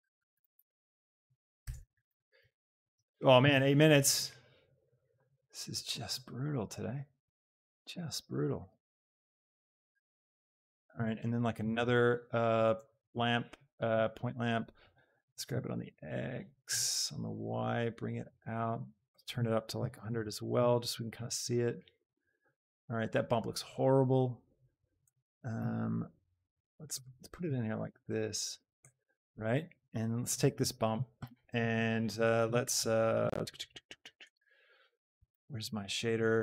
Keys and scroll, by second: 1.7 BackSpace, 3.5 Return, 11.6 shift+a, 15.2 g, 15.6 x, 16.7 y, 20.0 KP_0, 20.4 Return, 21.1 g, 21.5 y, 25.5 g, 27.3 g, 27.7 y.